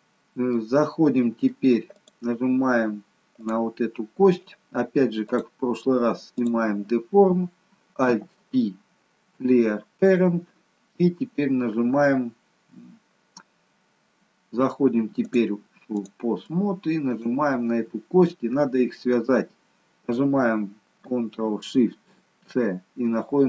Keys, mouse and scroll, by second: 0.0-0.5 scroll down 1, 0.5 middle click, 2.0 click, 3.4 click, 6.4 click, 8.0 alt+p, 15.2 click, 17.1 shift+click.